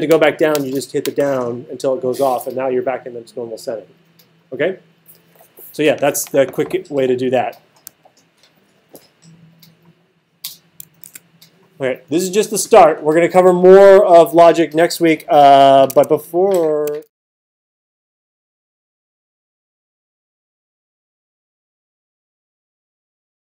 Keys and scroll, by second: 11.0 super+s, 15.9 super+Tab.